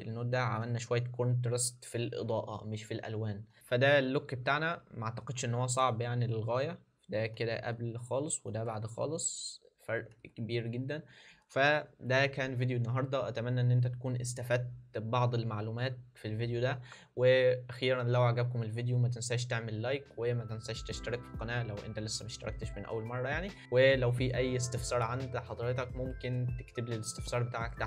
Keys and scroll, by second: 7.3 alt+d, 9.9 alt+d.